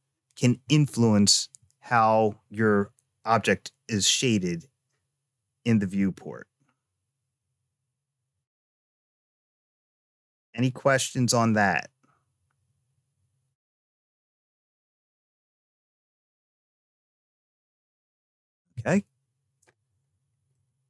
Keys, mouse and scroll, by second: 20.4-20.8 middle drag.